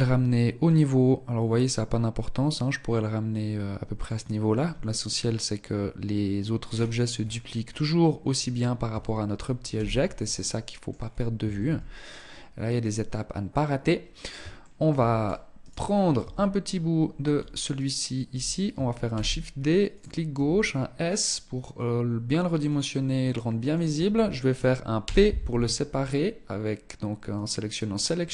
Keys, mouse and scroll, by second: 5.9-6.9 scroll down 9, 6.4-6.9 scroll up 1, 6.9-8.2 scroll up 3, 8.2 Tab, 9.0 z, 9.6 middle click, 10.3-11.5 scroll down 4, 11.5 ctrl+s, 13.9 shift+middle click, 14.4-14.7 scroll up 3, 15.0 right click, 15.5 Tab, 15.9-16.7 scroll up 3, 17.0 alt+right click, 18.3 shift+d, 19.6 s, 22.5 middle click, 24.3 p.